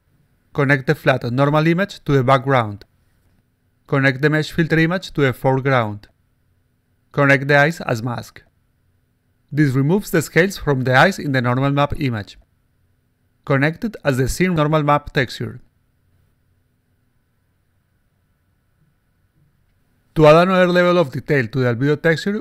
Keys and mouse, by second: 1.4 click, 4.1-6.4 drag, 7.2-8.4 drag, 9.9 click, 14.1-15.9 drag, 18.5 alt+click, 19.3-20.2 alt+drag, 20.9-22.2 alt+drag.